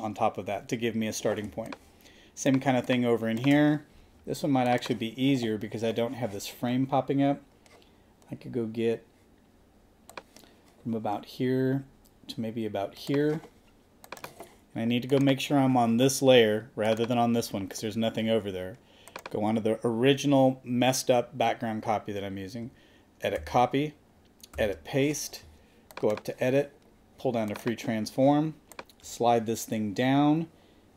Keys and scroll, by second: 1.4 space, 23.4 super+c, 24.5 super+v.